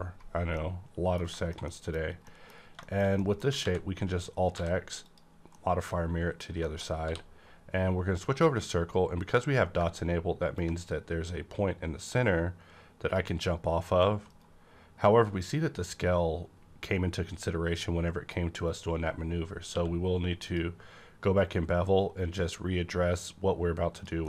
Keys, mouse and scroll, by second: 0.5 middle click, 0.6 middle click, 1.7 middle click, 2.0 scroll down 1, 2.3 middle click, 3.1 shift+middle click, 3.5 alt+x, 4.5 alt+x, 5.0 click, 5.8-6.9 middle drag, 5.8 click, 6.9 scroll up 1, 7.0 d, 9.8-10.6 scroll up 1, 9.8 d, 10.6-19.6 ctrl+drag, 14.3 right click, 14.3 right click, 19.6 q, 19.7 right click, 20.4 click, 20.5 click, 23.9 click.